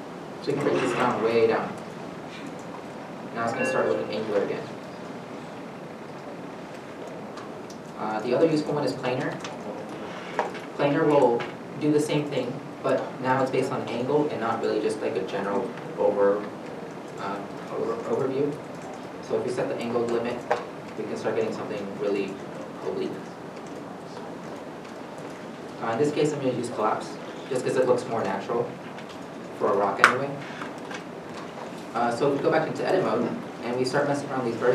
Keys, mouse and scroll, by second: 4.6 middle click, 22.7 middle click, 28.8 middle click, 32.8 Tab, 33.7 1, 34.4 middle click.